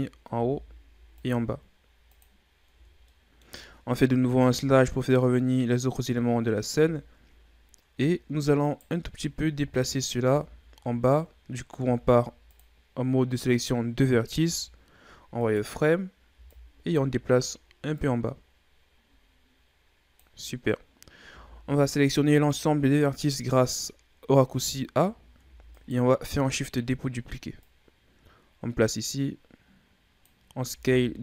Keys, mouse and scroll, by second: 0.3 ctrl+r, 2.7 Tab, 3.1-4.3 middle drag, 4.3 KP_Divide, 6.7 a, 8.0-8.6 shift+scroll down 3, 8.6 right click, 9.0 Tab, 9.6 z, 10.3 z, 11.8 ctrl+Tab, 14.5 z, 15.4 right click, 16.3 b, 17.9-21.1 drag, 21.3 a, 21.6 a, 25.3 shift+d, 26.7-27.6 scroll up 2, 27.6-30.6 drag, 30.7 s.